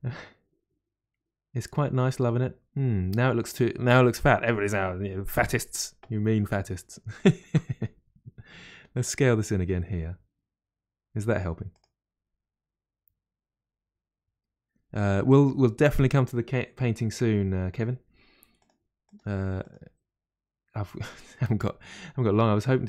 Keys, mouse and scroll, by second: 7.1 alt+click, 8.4 s, 8.5 s, 15.9 click, 18.0 g, 18.1 g, 19.0 click, 19.1 g.